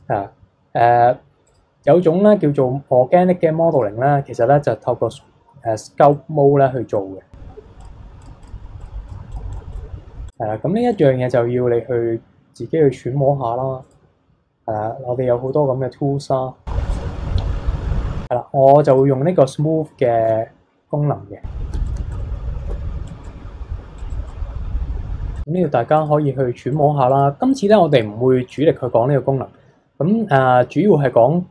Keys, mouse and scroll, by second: 1.4-4.5 drag, 4.7-5.2 scroll up 2, 5.2-6.6 middle drag, 6.6 scroll down 1, 6.9 middle click, 7.8-16.8 drag, 18.8 click, 19.2-20.0 scroll up 6, 20.0 shift+middle click, 20.3 scroll down 2, 21.7 f, 21.9 f, 22.2 middle click, 22.7 n, 23.0 click, 23.2 click, 23.4-24.0 scroll down 6, 24.1 click, 25.1 scroll down 3, 25.3-29.0 drag, 29.0-30.6 scroll down 3, 30.6 n, 31.1-31.5 scroll down 1.